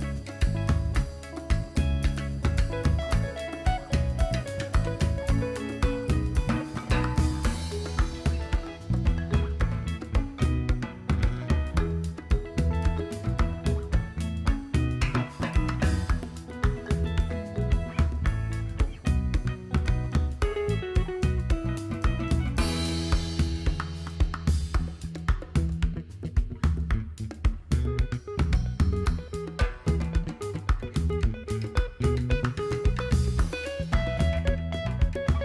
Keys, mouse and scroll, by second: 2.0 click, 2.5 click, 8.0 click.